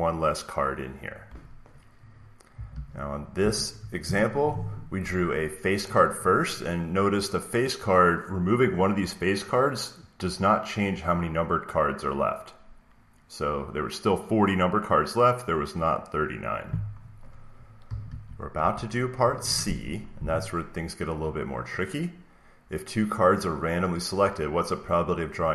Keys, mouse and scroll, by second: 2.4 click, 2.6 alt+Tab, 3.3 alt+Tab, 18.0 alt+Tab, 18.4 alt+Tab, 22.6 click.